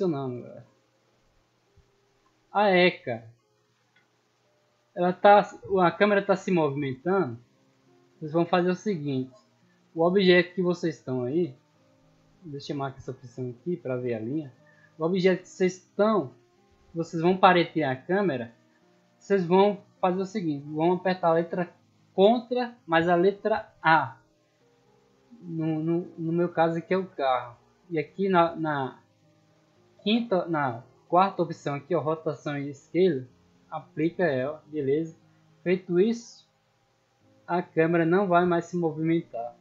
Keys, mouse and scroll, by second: 1.1 d, 2.8 w, 3.9 middle drag, 4.2 scroll down 1, 4.6-5.0 middle drag, 6.4-7.5 middle drag, 7.8 scroll up 2, 8.3 shift+middle drag, 8.6-9.2 scroll up 2, 9.2 middle drag, 9.8 shift+middle drag, 10.1 scroll down 2, 11.2 n, 11.8-12.5 scroll down 6, 13.5 click, 15.0-15.3 middle drag, 16.1 right click, 16.8 right click, 18.2-19.6 middle drag, 23.8 ctrl+a, 33.9 click, 34.8-35.1 middle drag, 36.5-37.9 middle drag, 38.1-39.6 typing.